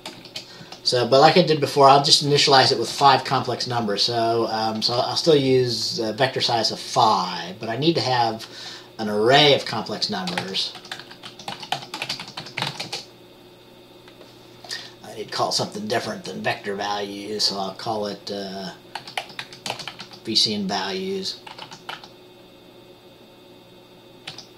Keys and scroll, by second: 0.0-0.8 typing, 3.1 Return, 10.6-13.0 typing, 19.1-20.2 typing, 21.7-22.1 typing, 24.4 typing.